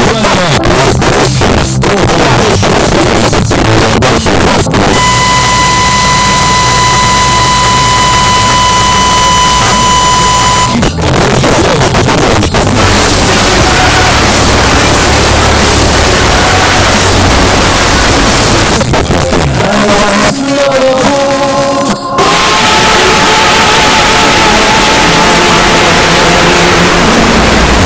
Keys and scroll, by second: 10.6 Page_Down, 18.7 Page_Down.